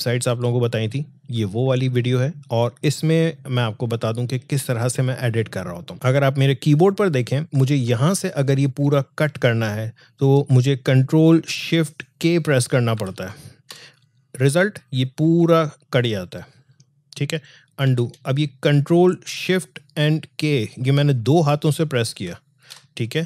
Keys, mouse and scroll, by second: 5.9 alt+scroll up 1, 10.8 alt+scroll up 1, 12.9 ctrl+shift+k, 17.4 ctrl+shift+k, 17.9 ctrl+z, 22.1 ctrl+shift+k.